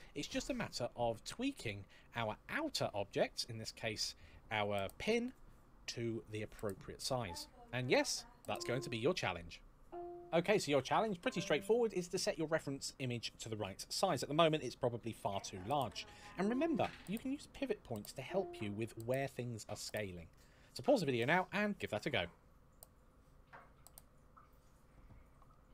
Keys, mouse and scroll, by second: 0.2-1.4 scroll down 1, 1.4 click.